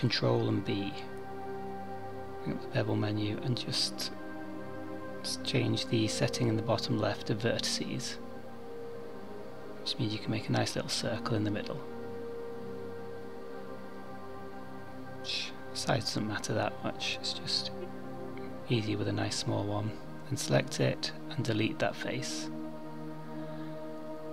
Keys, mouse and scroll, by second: 1.8 click, 3.5 click, 17.0 scroll up 4, 18.3 3, 19.1 click, 20.3 x, 22.8 2.